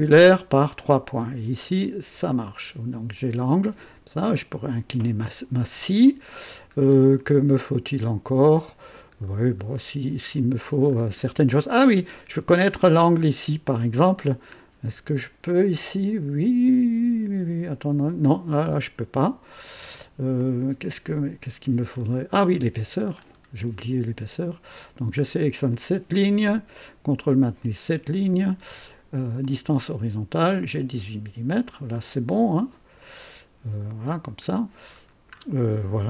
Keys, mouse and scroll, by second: 0.6 click, 2.1-3.6 drag, 6.1 scroll down 2, 7.0-7.3 scroll down 2, 7.5-8.9 right drag, 9.2-9.5 scroll up 2, 9.8-10.5 right drag, 10.8 scroll up 2, 11.5 right click, 11.6 click, 14.5-14.9 scroll down 2, 16.9 click, 20.3-21.3 drag, 22.0-22.3 scroll down 2, 22.3 right click, 23.2-23.6 scroll up 2, 23.6 right click, 25.7 click, 27.6 ctrl+click, 29.4 click, 30.7-31.7 drag, 33.0-34.2 drag, 34.4-35.6 scroll down 5, 35.7-36.0 right drag.